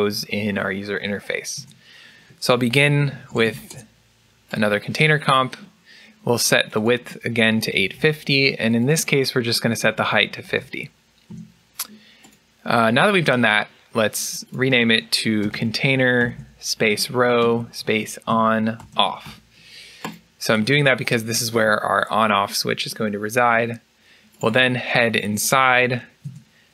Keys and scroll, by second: 7.4 Tab, 7.4 Return, 7.4 typing, 10.1-11.2 typing, 11.2 Return, 15.1 BackSpace, 17.1-17.8 typing, 22.2-22.9 typing.